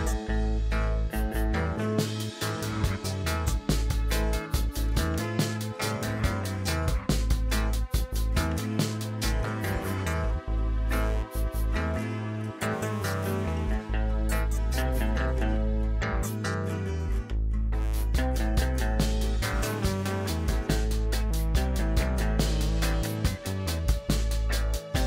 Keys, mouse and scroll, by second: 0.6 s, 1.3 click, 3.1 click, 5.0 middle click, 5.5-6.0 scroll down 1, 6.0-6.6 middle drag, 6.6 click, 7.1 middle click, 7.8-9.5 middle drag, 9.9 KP_0, 11.0-12.1 scroll down 7, 12.1 g, 12.6 click, 14.6 r, 15.0 click, 18.0-19.1 scroll up 7, 19.1 click, 21.7-23.8 scroll down 3.